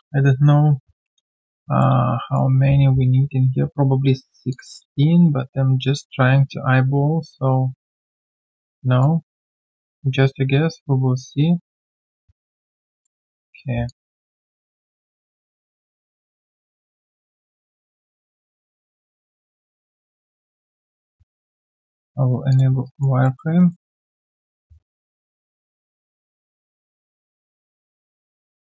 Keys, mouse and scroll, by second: 1.6 alt+middle click, 1.9 alt+q, 2.0 right click, 6.8 w, 9.4 right click, 12.8 right click, 13.0 alt+middle click, 14.9 r, 17.8-18.6 typing, 22.8 alt+right click, 23.2 alt+middle click, 23.6 alt+right click.